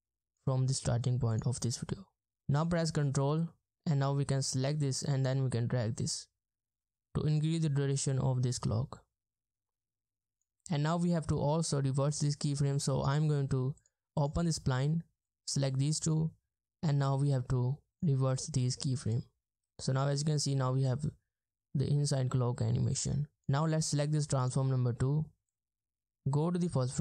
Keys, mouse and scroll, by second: 3.4 ctrl+click, 14.2 double click, 23.4 double click.